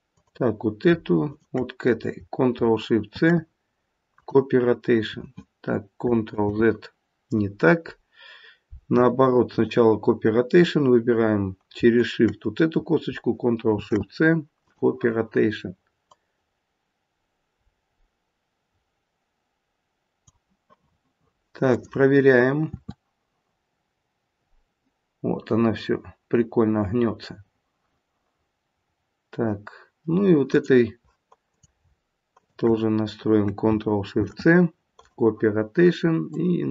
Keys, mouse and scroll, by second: 1.2 shift+click, 3.0 ctrl+shift+c, 6.3 ctrl+z, 11.9 click, 13.7 ctrl+shift+c, 16.1 click, 21.6 click, 22.7 r, 31.4 click, 32.3 shift+click, 34.1 ctrl+shift+c, 36.3 click.